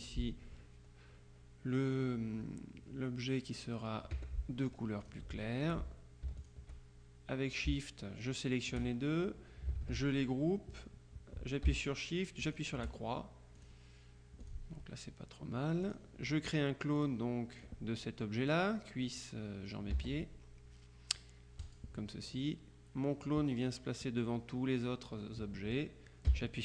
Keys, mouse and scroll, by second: 4.2 F7, 5.1 click, 5.8 F1, 6.5 shift+click, 9.9 ctrl+g, 12.5 shift+click, 13.6 click, 14.5 click, 15.9 click, 17.0 click, 17.7-19.1 drag, 20.0 ctrl+z, 21.7 click.